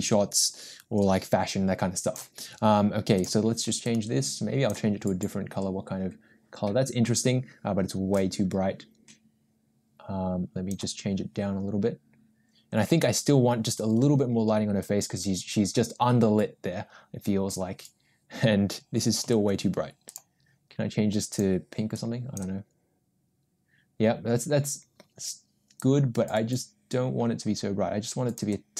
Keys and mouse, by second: 8.2-10.8 drag, 19.3 g, 21.3 click, 25.8-28.5 drag.